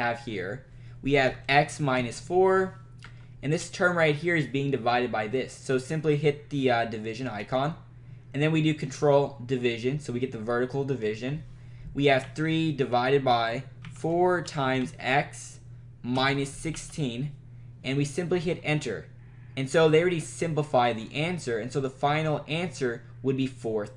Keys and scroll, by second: 1.2-2.6 typing, 3.2 Right, 7.5 /, 9.7 /, 12.3 3, 13.8-17.4 typing, 18.5 Return.